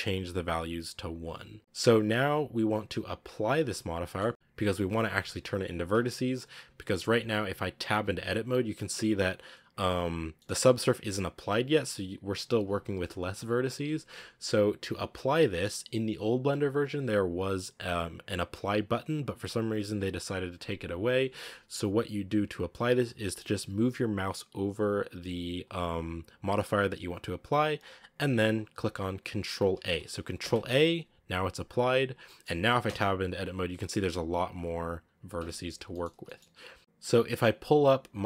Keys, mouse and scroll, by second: 3.4 scroll up 3, 3.9-6.5 middle drag, 6.5 right click, 7.8 Tab, 8.9-9.9 scroll up 3, 9.9 right click, 10.2 middle click, 10.4 g, 13.9 Tab, 30.3 ctrl+a, 31.9 scroll down 5, 32.1 middle click, 32.3 scroll up 2, 32.7 Tab, 33.0-33.4 scroll up 3, 34.2 right click, 34.4 g, 35.2 Tab, 35.4 scroll down 5, 35.8-38.2 middle drag.